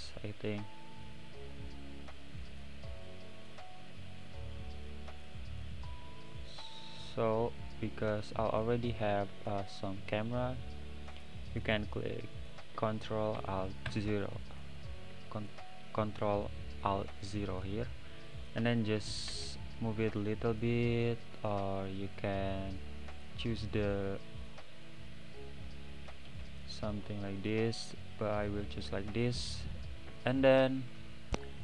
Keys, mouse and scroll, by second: 0.1-3.2 middle drag, 4.1-4.9 middle drag, 4.9-5.2 scroll down 4, 5.2-7.3 middle drag, 7.3-7.9 scroll up 2, 7.9-11.1 middle drag, 13.9 KP_0, 17.4 drag, 19.3 g, 26.3 g, 28.4 click, 28.8-29.2 scroll up 4, 29.4 scroll down 1, 30.1 n, 30.4 click, 31.0 middle click.